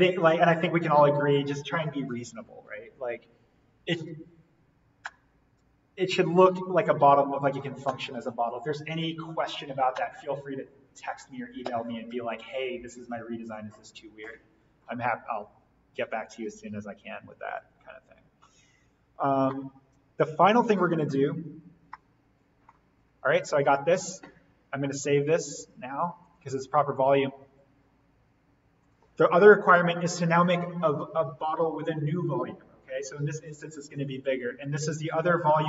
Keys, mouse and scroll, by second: 16.3-17.4 scroll up 1, 17.4 click, 17.8-18.5 scroll up 1, 18.5-19.5 scroll down 1, 19.5-21.5 middle drag, 21.5-21.9 scroll down 1, 21.9 middle click, 22.9-25.2 scroll up 1, 25.2 click, 29.1 click, 32.8 click.